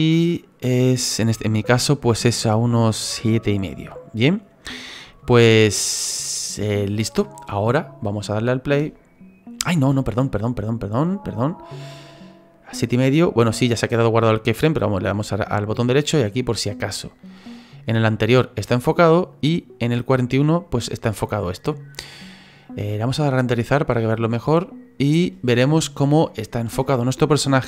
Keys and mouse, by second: 8.0 click, 8.8 space, 9.7 space, 13.9 right click, 14.5 click, 17.1 click, 19.3 click, 24.1 click, 24.5 click.